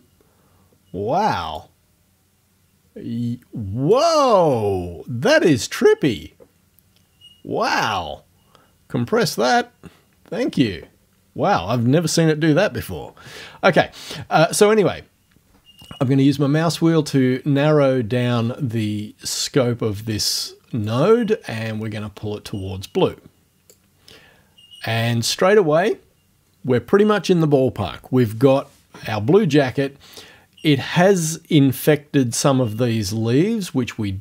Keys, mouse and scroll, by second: 1.6-4.1 drag, 7.7 click, 15.9-16.9 scroll up 2, 16.9-17.4 scroll up 1, 17.5 scroll up 2, 18.3 scroll up 2, 20.9-23.9 drag.